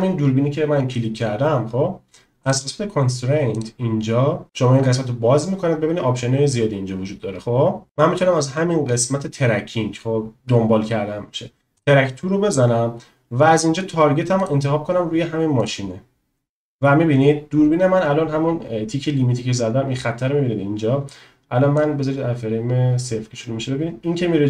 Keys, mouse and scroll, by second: 3.6-12.2 drag, 21.9-24.4 drag.